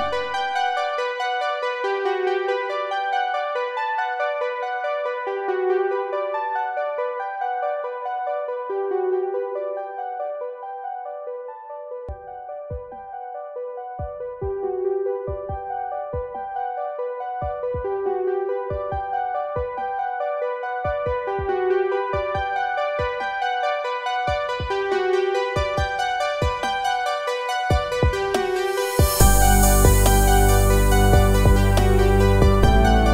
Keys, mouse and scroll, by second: 2.4 click, 6.4 click, 14.4 click, 18.6 ctrl+alt+shift+e, 23.5 click, 25.8-27.2 typing, 28.0 Return, 32.6 click.